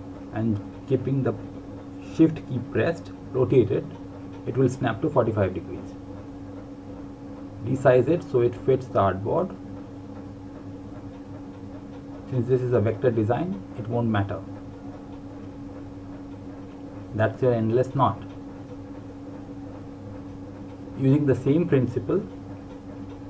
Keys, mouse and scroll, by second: 1.5 click, 5.0 click, 7.5 click, 11.5 click, 13.6 click.